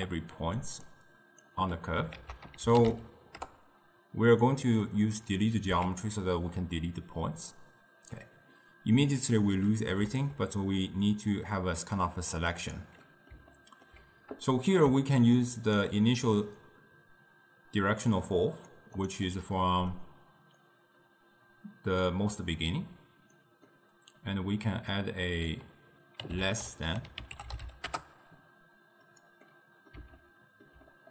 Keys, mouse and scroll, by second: 0.1 click, 0.7 d, 1.0 click, 1.5 d, 2.2 ctrl+a, 5.1 click, 5.8 x, 7.3 click, 8.6-11.1 middle drag, 11.1-12.8 drag, 13.1-15.5 middle drag, 15.5-16.7 shift+right drag, 16.7-19.2 drag, 19.3-20.7 middle drag, 20.7 click, 23.8-25.0 middle drag, 25.0 click, 29.5-31.1 middle drag.